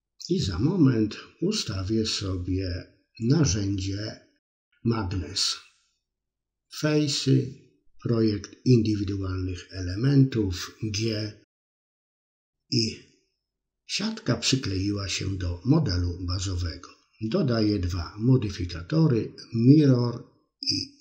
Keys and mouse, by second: 0.2 middle click, 0.9 KP_3, 1.2 middle click, 2.0 middle click, 3.2 KP_3, 3.7 a, 4.5-6.6 drag, 7.3 g, 8.8-10.4 drag, 10.8 click, 11.2 middle click, 13.0-14.0 drag, 15.3 click, 15.8-16.9 drag, 18.6-21.0 drag.